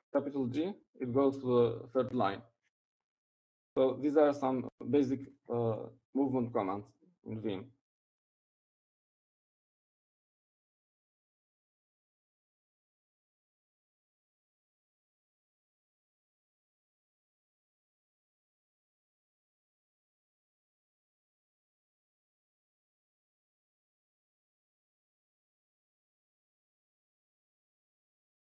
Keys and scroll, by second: 1.0 3, 2.9 shift+g.